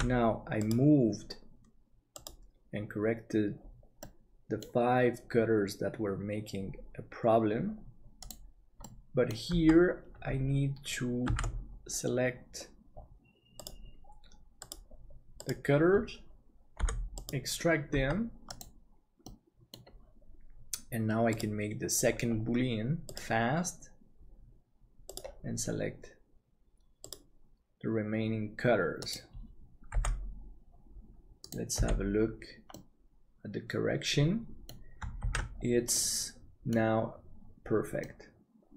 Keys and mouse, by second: 0.0 ctrl+s, 4.0-5.0 middle drag, 8.8-9.9 middle drag, 9.5 Tab, 11.2 alt+a, 16.7 p, 18.0 Tab, 19.2 middle click, 30.0 h, 31.8 h, 32.7-34.6 middle drag, 35.3 ctrl+s, 35.9-37.0 middle drag, 38.0-38.7 middle drag.